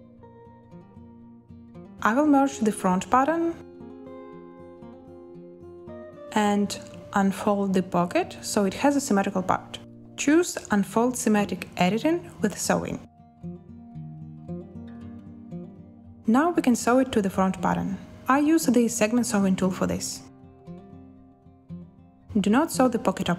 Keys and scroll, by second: 2.1 z, 17.9 n.